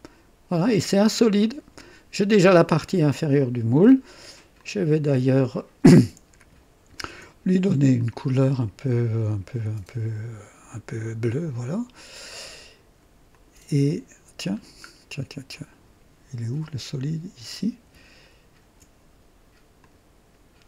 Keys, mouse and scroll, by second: 4.5-5.4 drag, 7.0 ctrl+d, 8.0 ctrl+click, 10.7 click, 11.9 click, 13.3 click, 14.5-14.9 scroll down 1, 15.5 click, 17.5 click, 18.2 ctrl+d, 18.2 ctrl+d, 19.8 click.